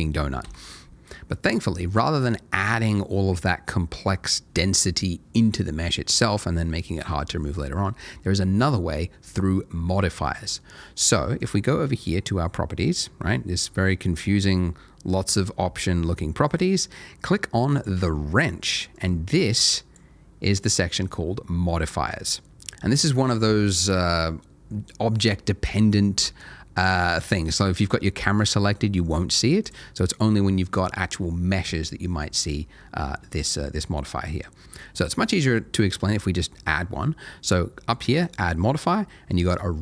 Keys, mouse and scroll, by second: 0.4 Escape, 11.4 click, 14.1-17.2 scroll down 1, 17.7 click, 27.8 click, 38.2 click.